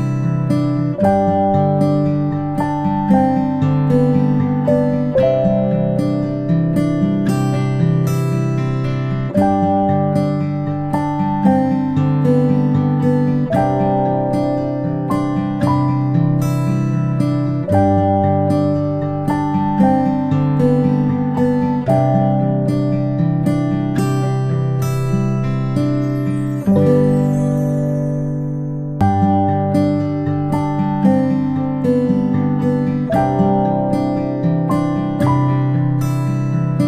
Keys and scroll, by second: 5.1 space, 9.7 space, 11.1 space, 11.4 space, 22.6 ctrl+shift+g, 34.1 ctrl+shift+[, 34.8 ctrl+], 35.6 ctrl+shift+].